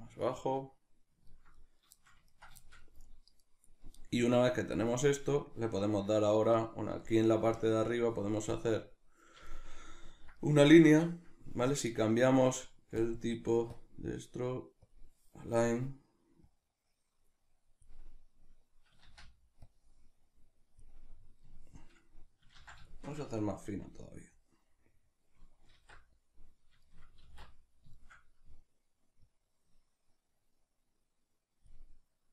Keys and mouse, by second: 17.9-21.1 drag, 19.0 ctrl+z, 21.1-24.7 middle drag, 22.6 ctrl+z, 23.7 f, 24.7 click, 25.9 alt+q, 26.8-31.7 shift+middle drag, 27.4 alt+q, 31.7 click.